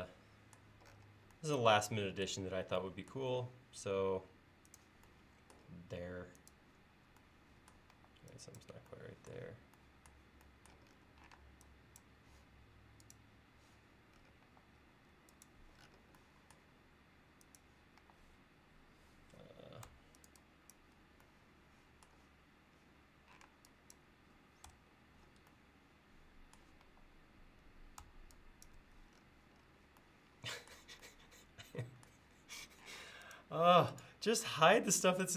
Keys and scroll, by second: 8.0 e, 11.4 space, 14.5 typing, 18.0 e, 23.5 space, 24.7 BackSpace, 26.9 e, 33.0 space.